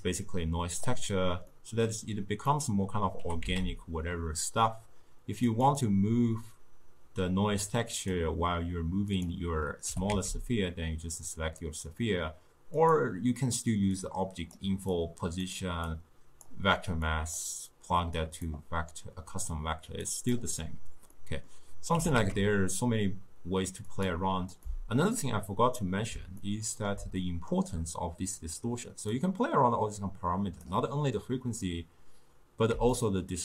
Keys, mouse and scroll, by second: 0.0-1.5 drag, 1.5-3.2 middle drag, 3.2 g, 8.0 click, 9.9 g, 14.0 click, 15.0 click, 15.9 click, 17.1 click, 18.2-20.2 drag, 21.2 middle click, 22.0 g, 24.7-29.2 middle drag, 29.2-32.2 drag, 33.0-33.4 shift+drag.